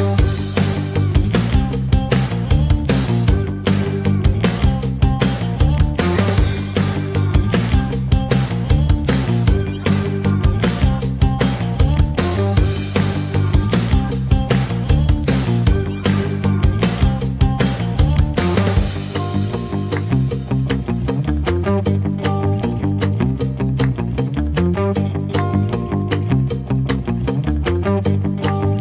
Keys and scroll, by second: 13.3 5, 13.4 Return, 25.6 Return.